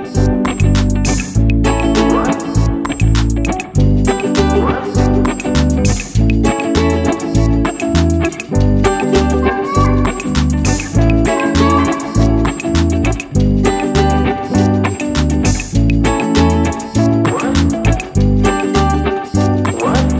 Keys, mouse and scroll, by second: 4.4 click, 6.7 click, 9.2 click, 11.6 click, 13.6 click, 14.6 click, 16.4-16.9 scroll up 2, 16.9 scroll down 2, 18.5 click.